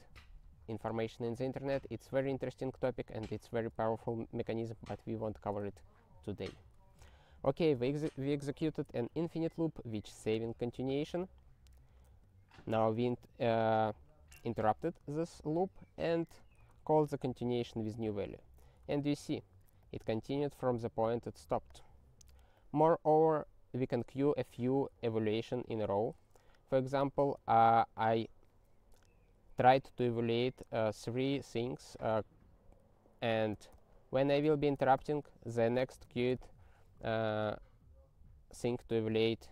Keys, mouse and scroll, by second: 6.6 ctrl+e, 10.3-10.8 scroll down 3, 12.8 ctrl+b, 15.2 ctrl+n, 15.3 ctrl+n, 16.6 ctrl+e, 18.9 ctrl+b, 22.6 click, 24.5 click, 25.0 ctrl+e, 25.4 ctrl+n, 25.9 ctrl+e, 26.9 ctrl+p, 27.2 ctrl+e, 33.8 ctrl+b.